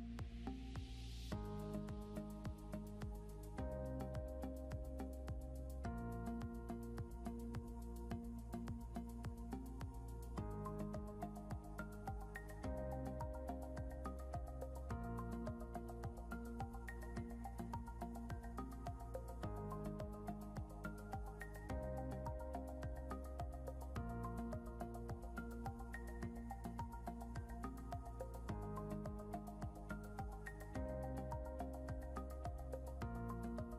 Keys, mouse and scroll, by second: 1.1 right click, 2.9 click, 4.2 right click, 7.0 click, 7.6 scroll up 1, 8.2 click, 13.2 scroll up 1, 13.7 click, 14.5 Up, 17.9 click, 18.8 Up, 19.9 Right, 21.1 click, 21.5-21.8 scroll down 2, 23.3 s.